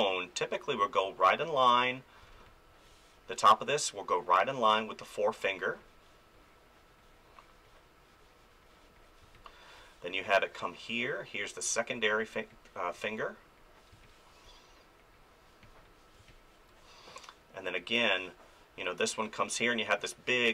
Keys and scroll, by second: 2.2 space, 9.2 space, 13.9 space, 16.2 space.